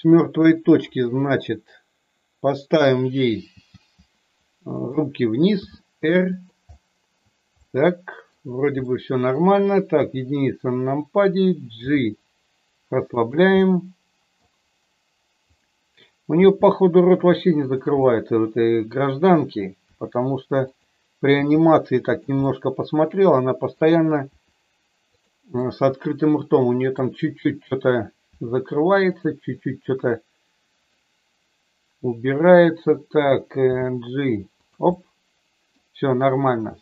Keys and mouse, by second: 0.4 click, 1.2-2.7 middle drag, 3.5 g, 4.7 click, 5.6 r, 6.2 click, 6.7 middle click, 7.6 middle click, 8.8 middle click, 9.8 KP_1, 11.7 g, 13.1 click, 13.6 middle click, 16.3 g, 17.6 click, 18.0 middle click, 19.9 r, 21.3 g, 22.3-23.7 middle drag, 24.2 r, 25.6-26.9 middle drag, 28.2 r, 30.0 KP_1, 30.8-32.7 middle drag, 33.6 g, 34.6 click, 34.8 middle click.